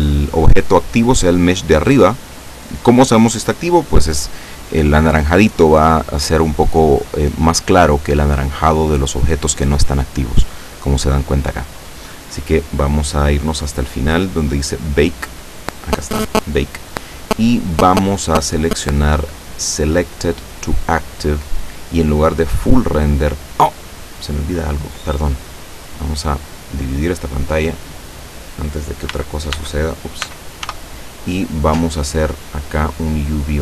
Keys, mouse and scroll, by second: 12.1-12.6 scroll down 4, 14.6 click, 15.1 scroll down 2, 20.3 click, 22.5 click, 27.0-28.4 drag, 29.2 n, 30.3 t, 32.8 click.